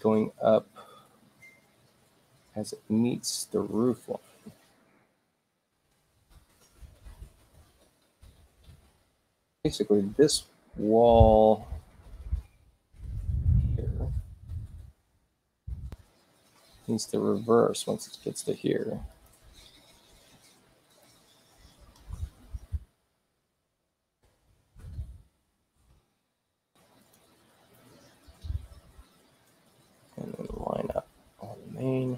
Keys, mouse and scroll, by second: 4.7 shift+u, 6.7 shift+u, 7.7 shift+i, 8.2 shift+u, 10.0 shift+u, 12.6 click, 17.0 click, 19.0 click, 20.8 click, 22.7 o, 23.6 click, 25.1 click, 26.9 click, 30.2 click.